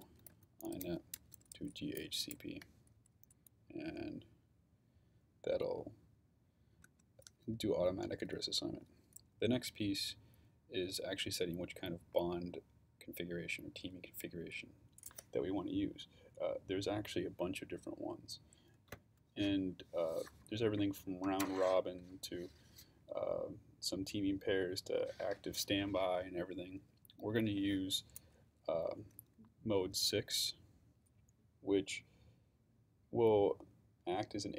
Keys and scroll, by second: 0.0-2.7 typing, 6.9 Return.